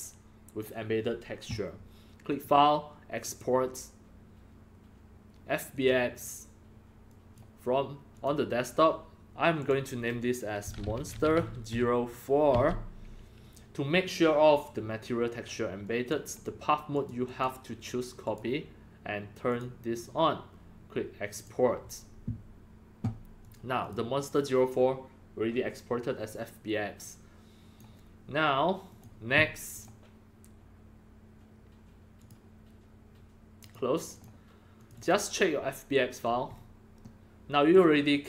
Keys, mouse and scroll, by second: 2.3 click, 3.2 click, 5.7 click, 7.0 click, 8.1 click, 9.6 click, 10.3-12.5 typing, 14.7 typing, 15.8 drag, 16.9 click, 17.2 click, 18.2 click, 19.4 click, 21.3 click, 23.4 click, 23.8 click, 26.9-27.8 drag, 28.8 click, 29.7 click, 32.2 click, 33.6 click, 34.1 click, 34.7 click, 34.9 click, 36.2 scroll up 2, 36.5-36.9 scroll down 3, 37.2-37.7 middle drag.